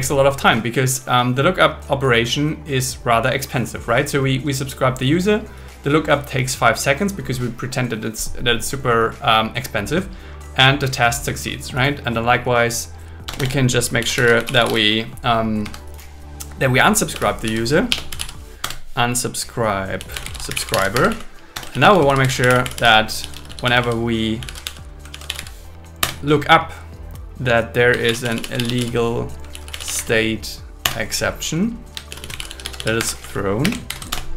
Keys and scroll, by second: 13.3 Return, 15.7 Escape, 17.9 BackSpace, 18.7 Return, 21.0 Escape, 21.1 Right, 21.5 Return, 21.7 shift+a, 22.0 shift+a, 26.0 Return, 28.1 shift+\, 29.5 shift+s, 30.8 Return, 32.1 shift+', 33.0 Escape, 33.4 Right, 33.6 space, 33.9 alt+8, 34.1 Return.